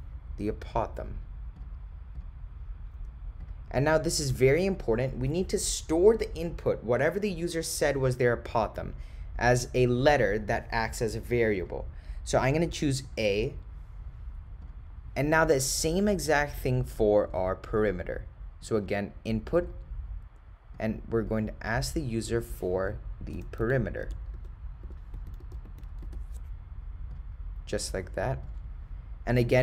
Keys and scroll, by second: 1.1 ., 1.6 0, 4.8 ,, 14.7 Return, 18.7 Right, 19.7 Return, 23.4-26.1 typing, 27.2 ., 27.8 0.